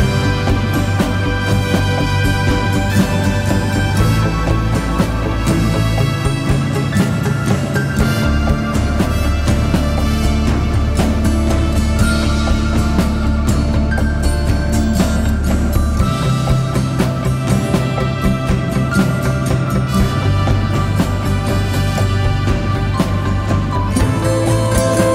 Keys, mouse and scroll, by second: 1.1 double click, 1.8 typing, 3.2 double click, 6.3 typing, 15.5-16.2 typing.